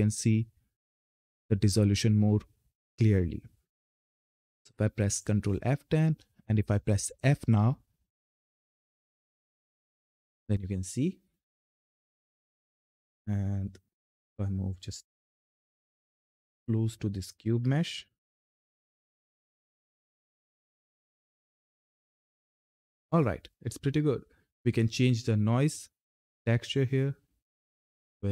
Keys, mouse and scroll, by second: 3.7 ctrl+F10, 7.1 f, 11.5-11.9 typing, 13.9 Up, 15.0 click, 16.1-17.0 scroll up 1, 17.3 ctrl+F10, 18.6 f, 24.4 click, 28.1 click.